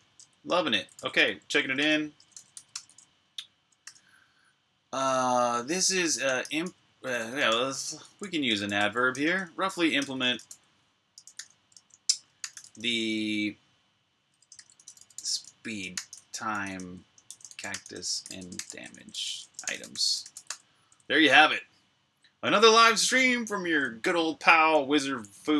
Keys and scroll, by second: 0.0-4.2 typing, 6.2-10.7 typing, 11.9-12.9 typing, 14.1-20.0 typing, 22.3 typing.